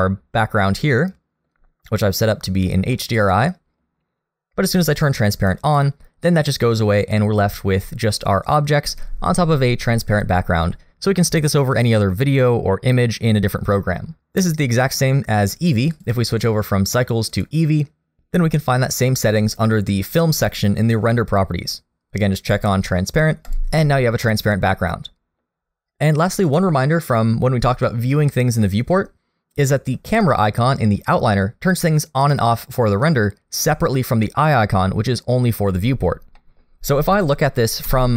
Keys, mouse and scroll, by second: 3.0 middle click, 5.6 click, 15.9 click, 19.3-20.5 scroll down 2, 20.5 click, 20.9 scroll down 2, 22.5 click, 23.5 click, 24.3 middle click, 36.4 middle click, 37.8 KP_0.